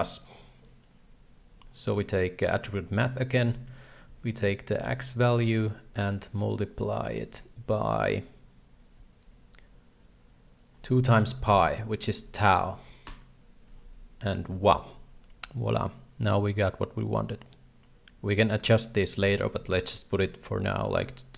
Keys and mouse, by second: 4.1 ctrl+c, 4.7 ctrl+v, 5.3 ctrl+v, 6.1 click, 10.5-13.7 drag, 15.6-18.8 shift+drag, 19.1-21.3 drag.